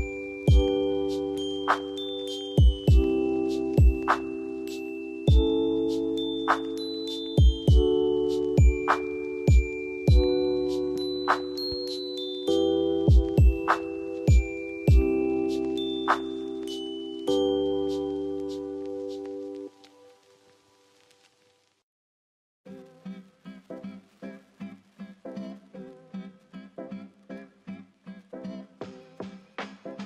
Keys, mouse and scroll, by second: 2.1 ctrl+alt+t, 3.6 ctrl+alt+t, 4.7 ctrl+alt+t, 6.8 ctrl+alt+t, 8.0 ctrl+t, 26.2 ctrl+j.